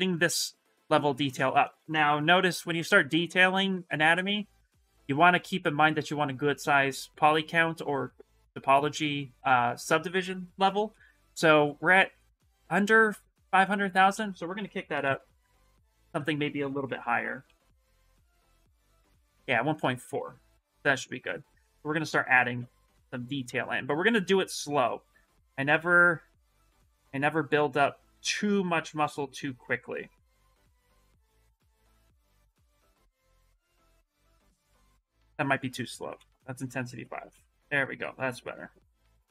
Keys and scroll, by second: 1.9 shift+m, 14.8 ctrl+d, 16.5 Escape, 17.7 d, 20.3 shift+m, 21.4 s, 23.3 space, 25.1 s, 35.0 space.